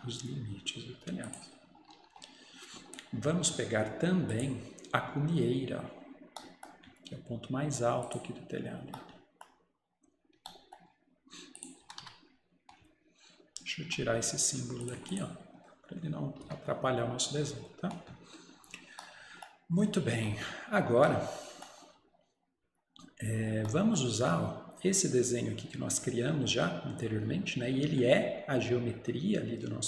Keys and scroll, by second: 0.6 Return, 1.8 Escape, 2.0 Escape, 11.9 Escape, 12.1 Escape, 16.5 Delete.